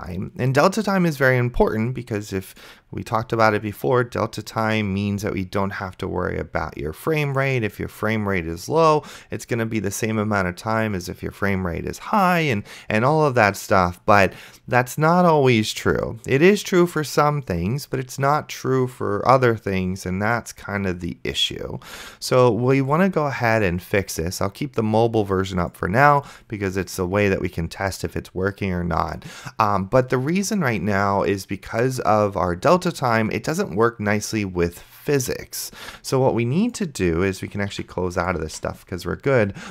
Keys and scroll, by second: 38.0 ctrl+w, 38.7 ctrl+w.